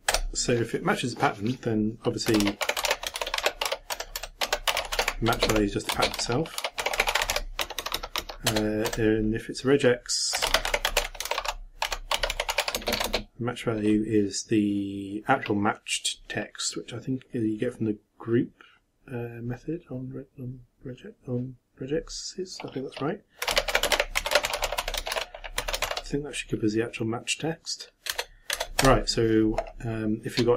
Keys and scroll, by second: 2.9-8.8 typing, 8.5 shift+Return, 11.3 shift+-, 11.9 v, 25.1 shift+9, 25.6 shift+0.